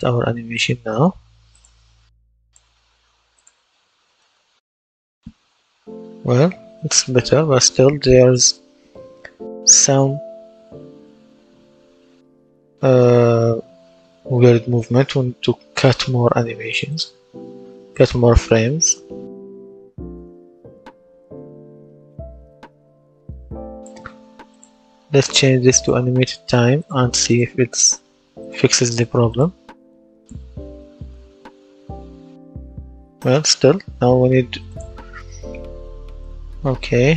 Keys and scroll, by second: 3.6 w, 4.0 space, 5.8 space, 7.6 space, 9.3 space, 10.9 space, 12.5 space, 14.9 Escape, 30.4 w, 30.8 space, 33.1 Escape.